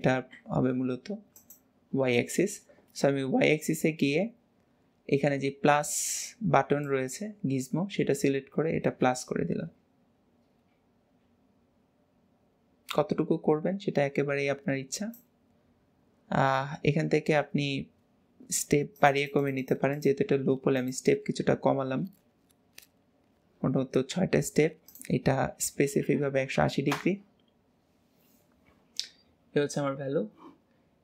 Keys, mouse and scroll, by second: 1.4 click, 3.1-3.9 scroll up 2, 3.9-4.4 scroll down 2, 6.9 click, 19.0 click, 19.3 Left, 25.0 Left, 25.0-28.1 drag.